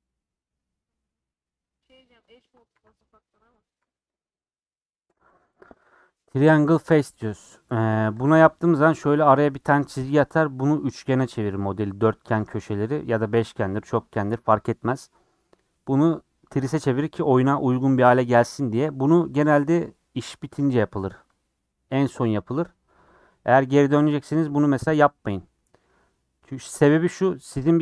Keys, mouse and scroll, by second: 3.3 middle click, 3.8 3, 8.7-14.7 middle drag, 14.7-15.4 scroll up 2, 15.4 scroll down 1, 27.0 scroll up 1, 27.1-27.8 middle drag.